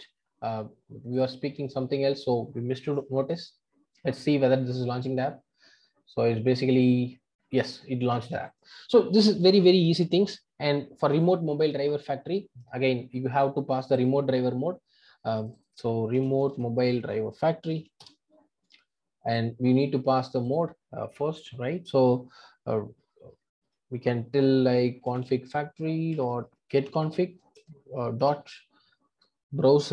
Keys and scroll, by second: 1.1 ctrl+r, 18.0 Return, 27.4 Return.